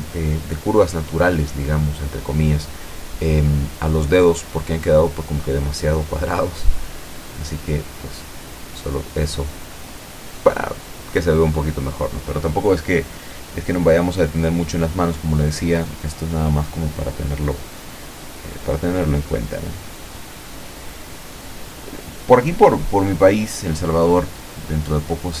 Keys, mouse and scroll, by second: 0.4 ctrl+click, 0.9 ctrl+click, 2.0 ctrl+click, 2.5 ctrl+click, 2.9 ctrl+click, 3.7-5.1 ctrl+middle drag, 6.2 ctrl+click, 7.6 ctrl+click, 8.4 ctrl+middle click, 9.7 ctrl+click, 10.9 ctrl+middle click, 12.1-13.3 ctrl+drag, 13.4 ctrl+middle click, 14.1-14.9 scroll up 2, 15.1-16.2 ctrl+drag, 16.4 ctrl+click, 16.9 ctrl+click, 17.4 ctrl+click, 18.2 ctrl+click, 18.8 ctrl+click, 19.3-19.6 ctrl+scroll down 1, 19.6 middle click, 20.1 click, 20.2-21.7 scroll up 1, 21.7 shift+middle click, 22.9 ctrl+click, 25.0 ctrl+middle click.